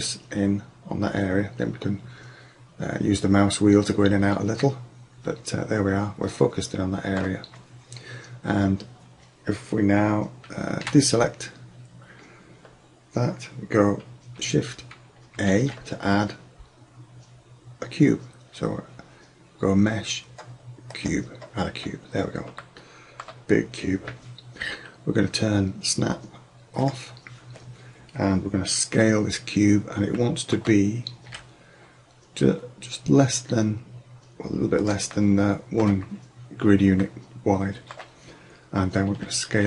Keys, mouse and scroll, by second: 1.3 middle click, 3.2 middle click, 4.7 middle click, 4.9 middle click, 5.2 click, 5.4 click, 5.6 click, 7.0 middle click, 10.8 a, 15.4 shift+a, 21.7-22.3 middle drag, 27.2-28.8 drag, 30.4 middle click, 31.4 s, 37.6 click, 37.7 click, 38.0-38.6 drag, 39.2 s.